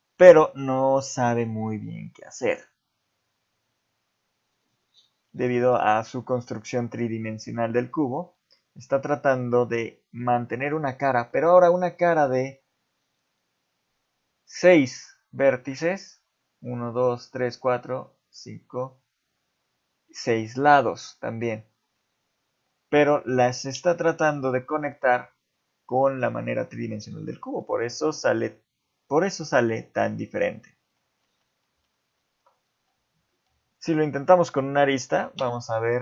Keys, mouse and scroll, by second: 5.5 shift+middle click, 8.0 middle click, 11.3 middle click, 21.0 middle click, 27.3 middle click, 29.9 middle click, 31.2 ctrl+z, 31.7 ctrl+z, 32.0 ctrl+z, 32.7 z, 33.8 shift+click, 35.4 x.